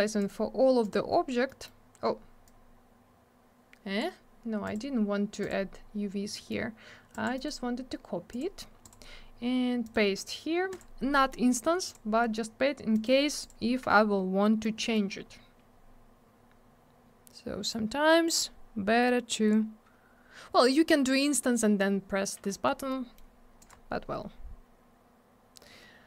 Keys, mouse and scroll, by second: 0.2 click, 0.3 click, 0.8 click, 0.9 click, 1.5 middle click, 1.7 middle click, 2.5 click, 4.7 click, 4.7 click, 5.4 click, 5.5 click, 6.3 middle click, 6.5 middle click, 7.1 click, 7.2 click, 7.4 right click, 7.5 right click, 8.3 click, 8.4 click, 8.8 click, 8.9 click, 9.8 right click, 9.9 right click, 10.7 click, 10.8 click, 11.1 middle click, 11.3 middle click, 11.9 click, 11.9 click, 12.9 right click, 13.0 right click, 13.4 click, 13.5 click, 14.4 middle click, 14.6 middle click, 14.8 middle click, 14.9 middle click, 15.1 scroll up 1, 17.7 click, 22.9 middle click, 23.6 click, 23.7 click.